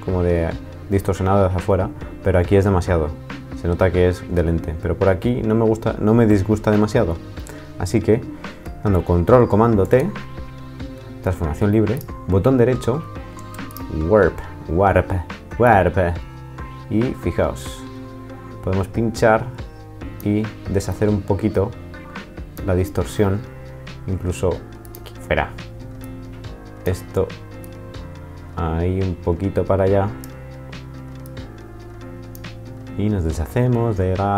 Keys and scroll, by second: 9.8 super+t.